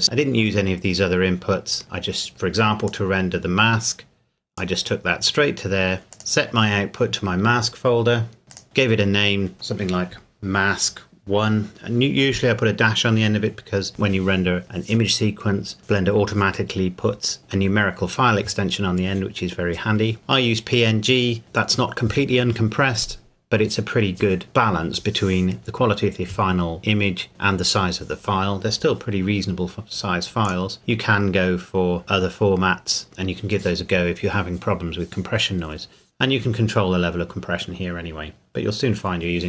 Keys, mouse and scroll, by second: 0.0 middle click, 3.1 click, 6.0 scroll down 1, 6.1 click, 8.5 click, 30.4 click.